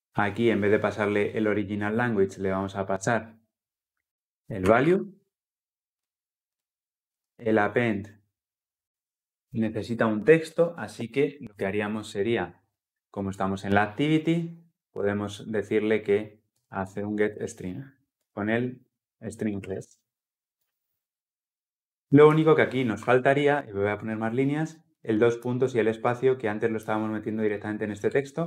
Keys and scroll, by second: 5.8 ctrl+F8, 7.0 ctrl+p, 18.0 Return, 20.3 Return, 24.1 ctrl+alt+l.